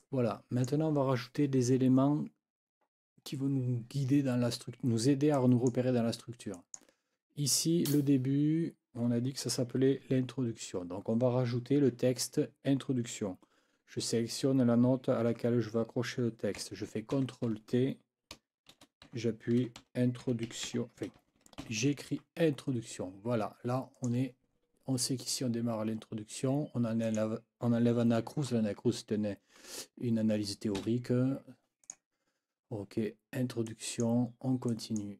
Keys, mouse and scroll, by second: 0.0 click, 5.3 click, 6.5 click, 7.8 click, 17.1 ctrl+t, 18.4-22.1 typing, 22.4 Escape, 24.0 click, 27.0 click, 30.8 Delete, 31.8 click, 33.6 click, 34.7 click.